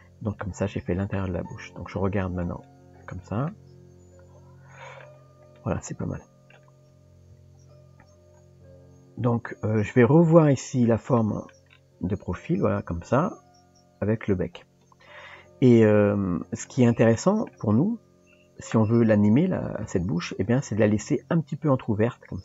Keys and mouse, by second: 0.4-1.2 middle drag, 2.5 click, 3.5-5.0 middle drag, 5.6-6.5 middle drag, 7.3 KP_3, 10.2 KP_1, 11.2-11.5 shift+middle drag, 17.2-17.5 shift+middle drag, 18.1 Tab, 19.3 click, 20.3 click, 21.0 g.